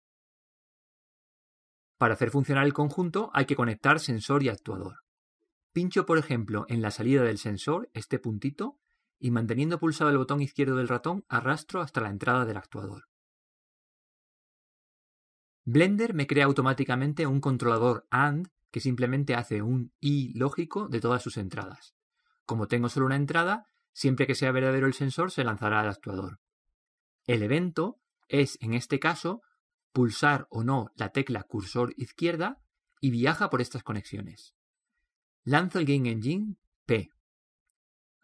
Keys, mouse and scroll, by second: 35.9 p, 37.5 p.